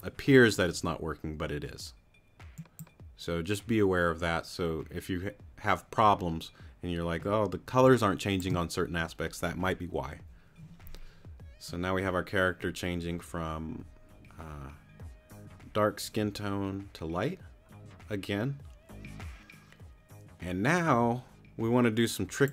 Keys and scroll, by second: 7.7 space.